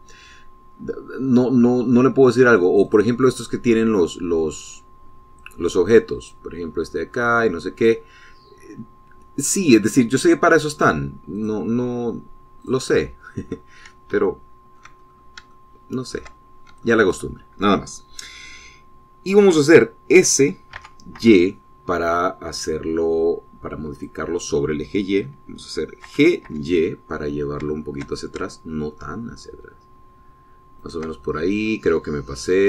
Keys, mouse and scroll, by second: 3.6 click, 7.0-12.4 drag, 13.4 click, 15.0 shift+middle click, 15.9 shift+scroll up 1, 16.3 shift+click, 17.2 shift+scroll down 2, 17.6 shift+click, 21.5 s, 22.0 y, 24.7 click, 26.8 g, 27.2 y, 31.6 shift+click, 32.0-32.3 shift+scroll down 3, 32.5-32.6 drag.